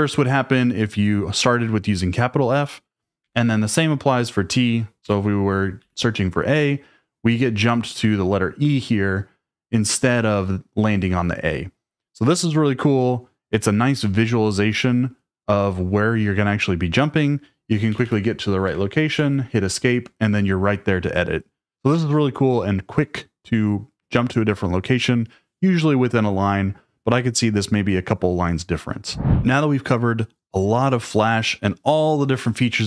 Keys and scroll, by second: 3.2 u, 5.0 t, 5.8 a, 17.9-19.1 typing.